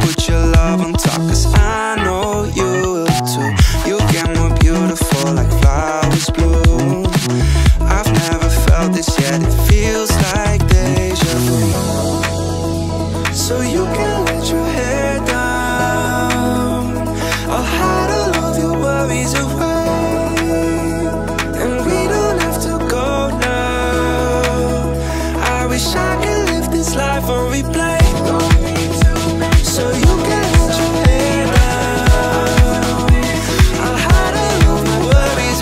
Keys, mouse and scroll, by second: 1.7 click, 2.0 Tab, 3.7-4.6 drag, 5.8 click, 6.5 Tab, 7.8 /, 8.4-8.8 scroll down 2, 9.0-9.5 middle drag, 10.3 space, 10.6-11.0 scroll up 1, 11.0-11.4 middle drag, 11.9-13.0 scroll down 1, 13.8 space, 14.2 click, 16.0 click, 16.8 click, 22.6-23.1 drag, 24.3 click, 25.5 click, 26.8 click, 27.4 click, 34.8 click.